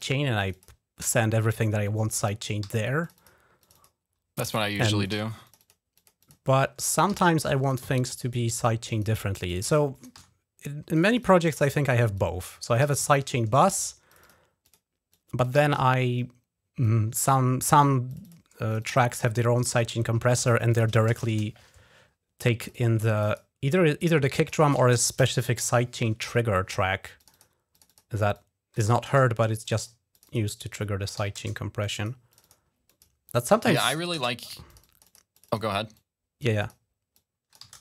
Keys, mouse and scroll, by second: 0.2 click, 1.3 click, 2.5 Delete, 2.5 l, 2.9 click, 3.0 click, 3.5 click, 4.4 click, 5.0 Delete, 5.3-7.2 drag, 6.9 Delete, 7.3-8.4 drag, 8.5 click, 9.3 click, 10.0 Delete, 10.8-12.9 drag, 12.7 Delete, 13.1 Return, 13.5 click, 13.6 click, 13.9 click, 14.5 click, 15.0 click, 15.4 Delete, 15.6 Return, 16.7 click, 17.9 click, 18.1 click, 18.5 click, 18.7 click, 19.2 click, 20.9 shift+l, 21.2 Return, 22.4 click, 23.0 right click, 23.1 right click, 23.9 right click, 25.2 shift+p, 25.5 Return, 27.0 click, 27.6 click, 27.7 click, 28.2 click, 28.7 Delete, 28.9 Return, 29.5 click, 30.0 click, 30.1 click, 30.6 click, 31.0 l, 31.7 click, 32.2 click, 32.3 click, 32.7 click, 33.1 click, 33.8 Delete, 34.0 Return, 34.6 click, 35.2 click, 35.8 click, 36.4 click, 37.0 click, 37.5 Delete, 37.5 click, 37.6 Return.